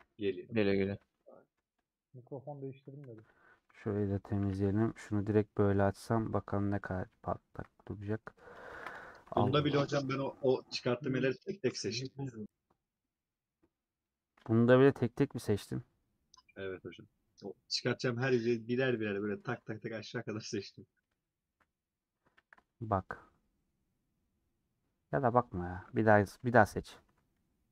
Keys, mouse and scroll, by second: 0.3 /, 0.5 middle click, 1.1 Tab, 1.1 middle click, 1.6 3, 1.7-3.6 drag, 3.6 middle click, 4.5 a, 6.5-7.0 scroll up 1, 7.0 Tab, 7.4 KP_Decimal, 8.1 scroll up 1, 8.3 middle click, 8.7 ctrl+a, 10.9 middle click, 11.5-11.8 scroll up 2, 12.1 middle click, 12.5 scroll up 1, 12.8 scroll down 1, 12.9-14.6 middle drag, 14.6 Tab, 14.6-18.0 middle drag, 19.5-20.1 scroll down 4, 19.6 Tab, 21.5 shift+s, 26.4 /, 27.6 scroll down 3.